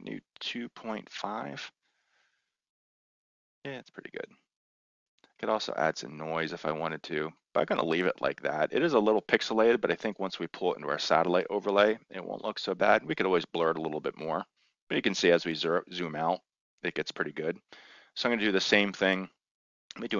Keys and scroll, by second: 0.4-2.2 typing.